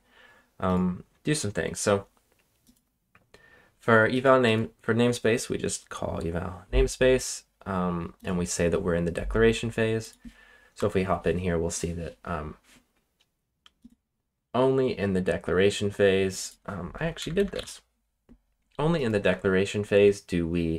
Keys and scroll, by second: 10.7 Return, 16.9-18.0 typing.